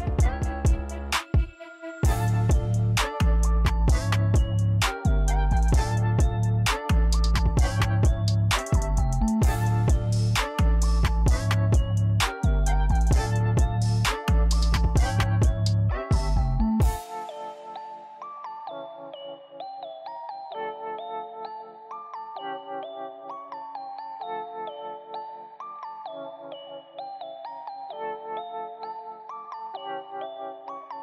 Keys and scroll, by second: 4.7 3, 6.1-7.0 typing, 9.5 1, 10.7-11.4 typing, 13.1-15.8 typing, 16.9-17.6 typing.